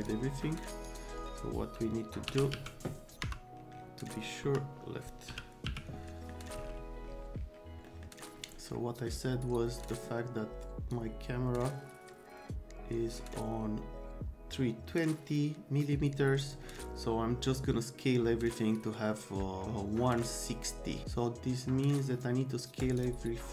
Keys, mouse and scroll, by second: 0.0 click, 0.8 click, 2.3 f, 2.5 z, 3.2 F3, 4.4 F3, 5.3 l, 5.7 z, 6.1 middle click, 7.9 middle drag, 9.8 click, 10.9-23.0 drag, 22.8 right click.